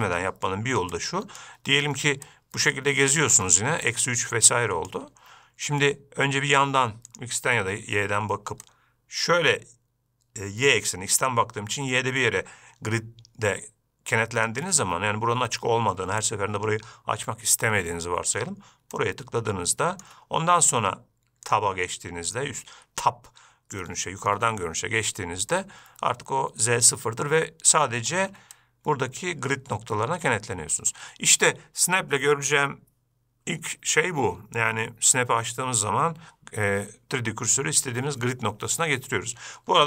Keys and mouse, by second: 1.4-1.9 right drag, 2.6 shift+click, 4.2-5.3 shift+drag, 8.9-14.8 shift+drag, 19.2-20.3 shift+drag, 21.8-23.8 drag, 24.2-24.6 shift+middle drag, 25.8-28.1 shift+right drag, 28.9-31.2 shift+drag.